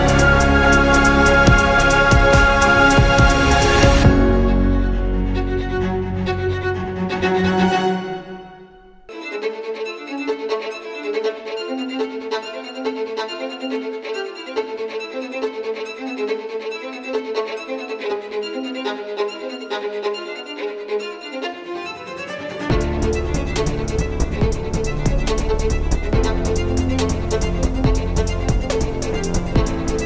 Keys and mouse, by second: 0.5 z, 6.4 KP_1, 7.0 ctrl+KP_1, 7.9 z, 8.5 z, 18.1 r, 20.2 click, 26.2 z.